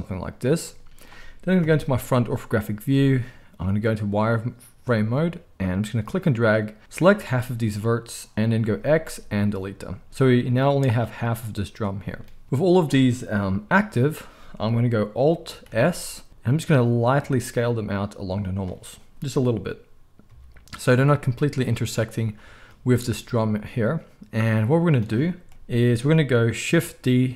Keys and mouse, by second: 1.6 KP_1, 2.8 z, 5.8-18.5 drag, 8.6 x, 13.4 KP_1, 15.6 alt+s, 18.5-26.9 shift+middle drag, 20.2 z, 25.5 KP_1.